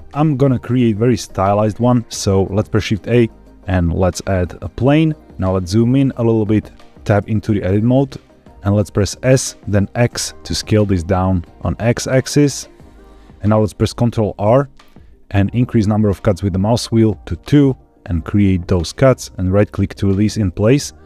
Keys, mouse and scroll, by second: 2.6 shift+a, 5.2 middle click, 5.4-5.8 scroll up 3, 5.9 shift+middle click, 7.2 Tab, 7.8-8.4 middle drag, 9.3 s, 10.0 x, 12.8 click, 14.3 ctrl+r, 19.5 right click.